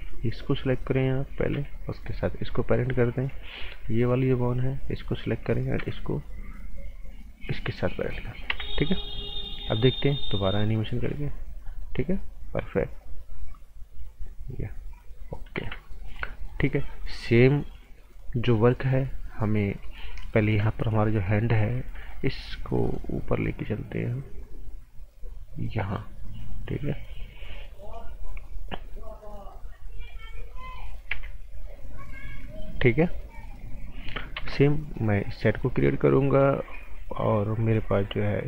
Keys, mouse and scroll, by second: 0.0 b, 0.5 click, 1.5 p, 2.4 click, 2.7 right click, 3.7 b, 4.4 click, 4.7 right click, 5.7 p, 7.3 click, 7.7 scroll down 1, 7.9 right click, 8.5 z, 8.5 scroll down 1, 8.8 right click, 9.3-9.7 scroll up 1, 9.7 click, 9.9 right click, 10.5 click, 11.8 right click, 13.0 click, 15.6 z, 15.9 scroll down 1, 16.0 right click, 21.3 click, 27.7 scroll down 1, 27.9 right click, 28.5 scroll up 1, 28.7 right click, 30.2 scroll up 1, 30.5 right click, 31.1 z, 31.6 click, 34.3 ctrl+z, 34.7 scroll down 1, 34.9 right click.